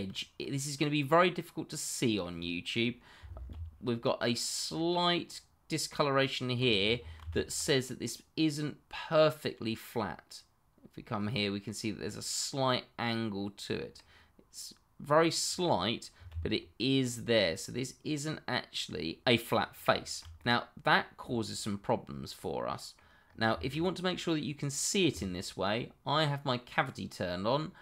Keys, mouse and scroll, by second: 3.5 d, 4.6 click, 7.2 ctrl+z, 8.0 middle click, 16.3 d, 17.1 click, 20.0 ctrl+z, 20.3 middle click, 21.1 scroll down 1, 21.4 shift+middle click, 21.5 middle click, 21.7 shift+middle click, 21.7 middle click, 22.1 scroll down 1, 22.4 middle click, 23.2-23.6 scroll up 1, 23.6 shift+middle click, 24.0 middle click.